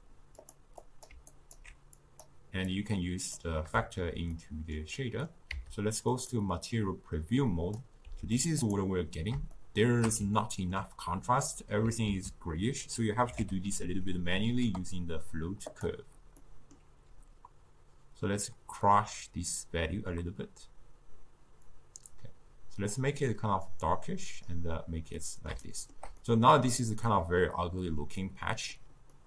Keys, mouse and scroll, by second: 2.1 click, 3.5-6.6 drag, 6.6 z, 9.7-16.0 shift+middle drag, 21.4-23.0 middle drag, 23.0-25.3 drag, 25.3-29.2 middle drag.